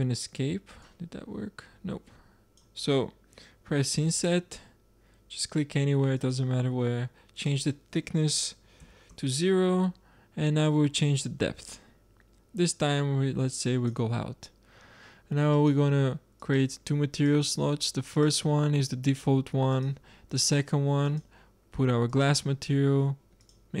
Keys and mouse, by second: 0.8-2.0 drag, 3.9-5.0 middle drag, 5.3 middle click, 7.3-9.1 drag, 10.5 click, 15.5-16.5 drag.